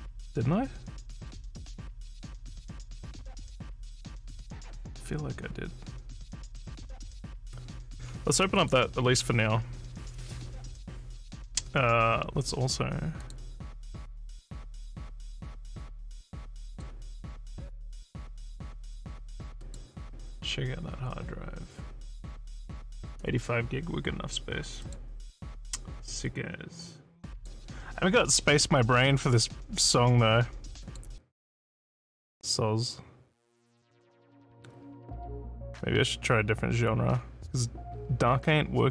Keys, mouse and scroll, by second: 8.6 click, 13.2 click, 16.7 click, 19.6 click, 24.8 click, 27.4 click, 30.9 click.